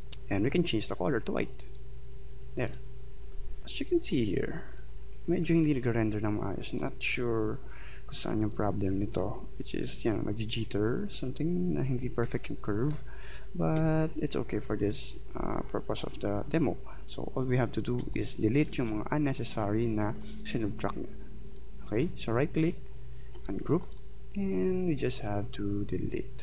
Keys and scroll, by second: 5.8 ctrl+z, 13.8 space, 18.0 space.